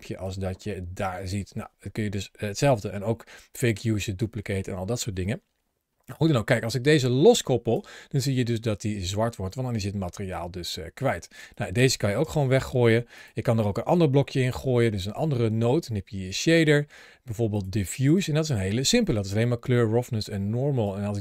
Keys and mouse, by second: 7.0-7.7 drag, 11.3 click, 12.0 Delete, 13.0 click, 13.3 shift+a, 20.7-21.2 drag.